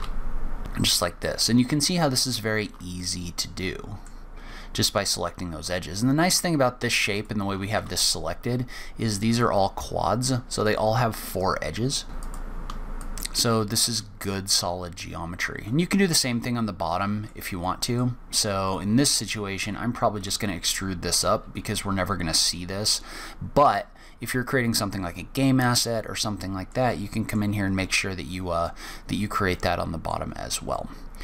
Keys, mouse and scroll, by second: 0.0 click, 0.2 click, 0.4 middle click, 0.4 f, 1.3 click, 2.3 shift+click, 3.0 middle click, 7.1 shift+click, 7.7 f, 10.6 click, 11.3 shift+click, 12.1 shift+click, 12.2 shift+click, 12.5 middle click, 12.5 f, 12.8 shift+middle click, 13.3 middle click, 13.6-14.0 scroll down 4, 14.0 middle click, 15.3-16.0 scroll down 2, 15.6 middle click, 17.6 middle click, 18.6 click, 20.1 click, 21.1 click, 21.6 e, 26.1 middle click, 26.8 middle click, 29.5 middle click, 30.2-31.0 scroll up 3, 30.7 middle click.